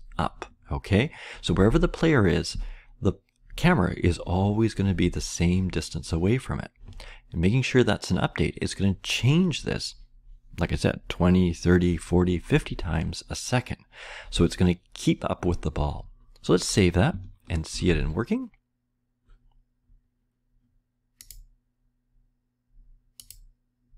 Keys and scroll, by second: 17.7 ctrl+s.